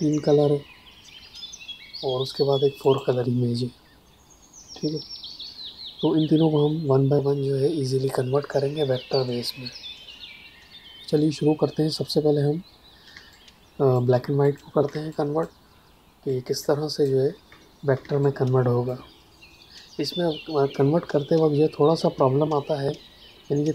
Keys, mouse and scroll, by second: 2.8 click, 13.0 space, 13.2 click, 13.5 space, 14.4 click, 14.8 space, 15.0 click, 15.3 space, 16.2 ctrl+click, 17.9 space, 18.2 click, 18.4 space.